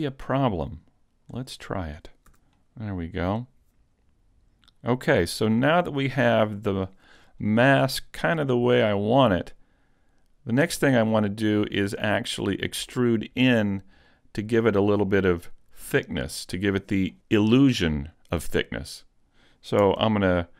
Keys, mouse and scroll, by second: 0.6 click, 1.9 scroll down 1, 2.3 a, 2.6 middle click, 5.1 scroll up 1, 5.3 shift+middle click, 6.0 scroll down 1, 6.6 middle click, 9.3 middle click, 14.1 middle click, 16.0 middle click.